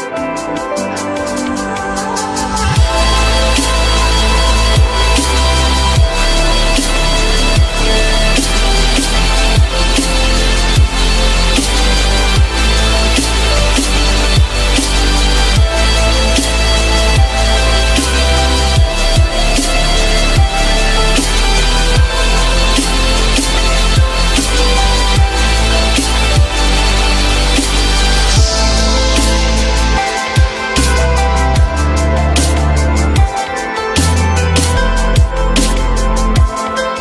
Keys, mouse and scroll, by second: 0.8 shift+click, 16.3 shift+click, 16.7 shift+click, 16.8 shift+double click, 23.4 alt+middle click, 28.3 ctrl+click, 30.0 alt+middle click, 35.0 ctrl+click.